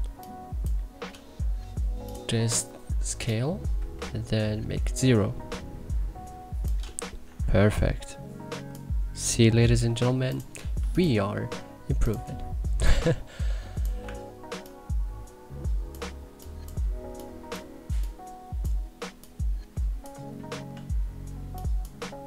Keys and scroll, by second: 7.0 e.